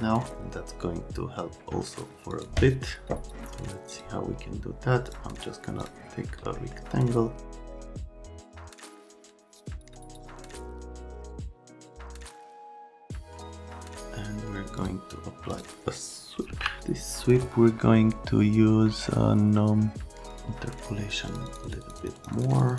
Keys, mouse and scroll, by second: 2.3 click, 3.9 click, 5.0 click, 5.8 click, 6.5 right click, 7.9 click, 8.8 click, 9.2 right click, 9.5 click, 9.9 click, 10.2 Delete, 10.3 click, 11.9 click, 12.4 right click, 14.8 click, 15.5 click, 16.1-17.0 typing, 20.3 click, 21.3 click, 21.5 click, 21.6 click, 21.8 click, 22.0 click, 22.2 click, 22.3 click, 22.5 click, 22.7 click.